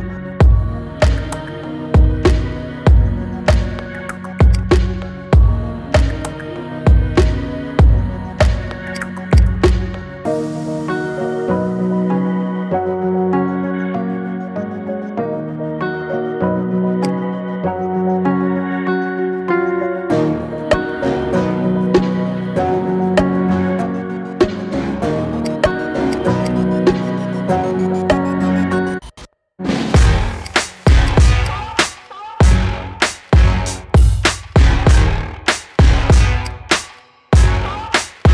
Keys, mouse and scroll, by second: 0.4 ctrl+shift+b, 4.9 Tab, 6.0 KP_3, 6.8 Tab, 7.4-8.8 shift+middle drag, 8.8 click, 9.1 click, 10.0 KP_3, 11.1 e, 17.0 scroll up 3, 17.4-18.5 shift+middle drag, 18.5 scroll down 3, 18.8-20.0 middle drag, 20.0 KP_1, 20.6-21.0 scroll down 1, 21.0 shift+middle click, 21.8 Tab, 22.2 middle click, 22.9 KP_1, 23.4-23.8 scroll up 1, 23.8-25.2 shift+middle drag, 25.2-25.5 drag, 25.8 click, 26.2 click, 26.5-27.5 middle drag, 27.5-27.9 scroll up 3, 27.9-28.6 shift+middle drag, 28.6 Tab, 29.7 click, 30.2 click, 30.6 alt+shift+click, 31.3 alt+shift+click, 33.3 ctrl+b, 36.5-37.7 scroll up 2, 37.7 scroll down 2, 37.9 middle click.